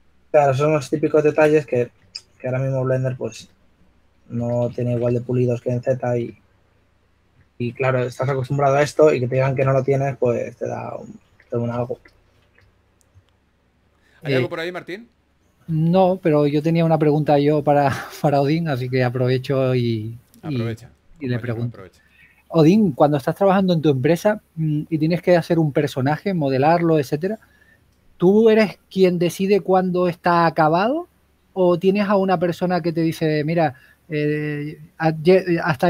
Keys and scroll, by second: 2.2 s, 5.4 s, 8.9-10.0 typing, 12.6-13.5 typing, 14.8-16.5 typing, 17.8-18.6 typing, 18.8 super+z, 22.7 s, 26.7 s, 29.1 typing, 30.7-31.5 typing.